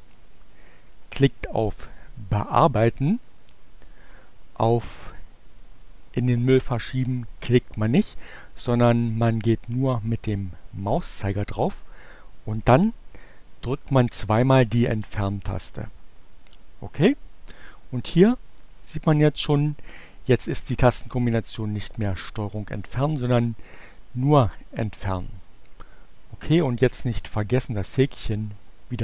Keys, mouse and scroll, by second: 0.7 click, 14.9 Delete, 25.4 click, 26.6 click.